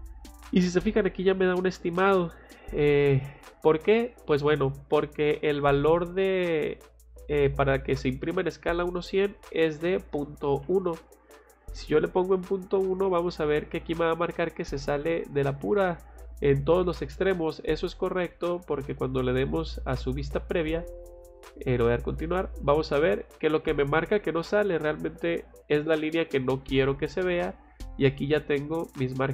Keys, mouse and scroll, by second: 2.2 click, 3.2 click, 12.9 click, 20.4 click, 21.5 click, 28.8 scroll down 2.